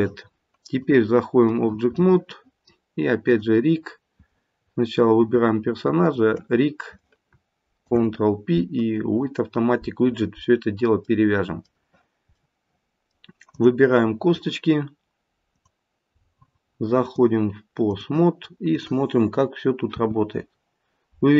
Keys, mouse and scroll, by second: 1.6 click, 2.0 middle click, 2.4 middle click, 3.2 click, 3.7-4.6 scroll down 2, 4.6-5.6 scroll down 2, 6.0 shift+click, 13.5 click, 17.0 click, 18.6 click, 19.9 r.